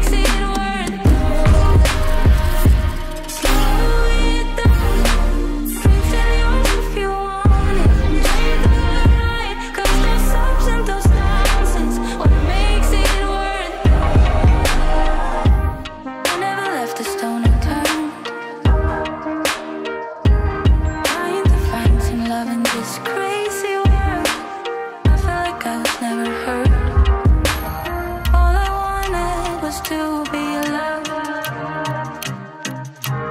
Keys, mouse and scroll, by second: 2.8-5.3 drag, 9.0-11.2 drag, 16.3 space, 24.2 space, 25.0 s, 25.7-29.1 drag, 32.8 ctrl+s.